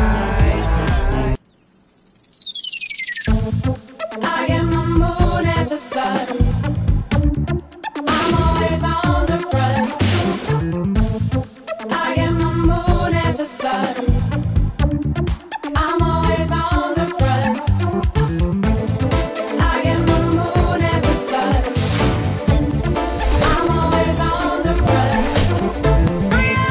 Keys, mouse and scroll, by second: 5.8 click, 8.0 click, 8.2 click, 13.5 click, 14.6 click, 20.8 click, 24.1 ctrl+drag, 25.1 ctrl+click, 26.5-26.7 drag.